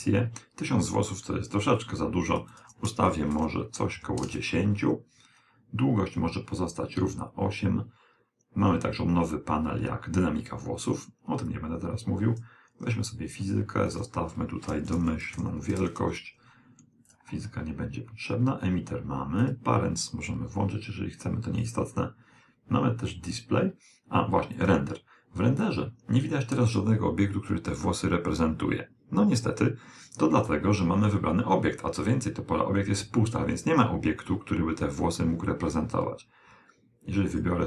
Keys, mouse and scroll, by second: 11.6 click, 14.0 click, 17.2 click, 19.5 click, 21.6 click, 24.6 click, 37.4 click.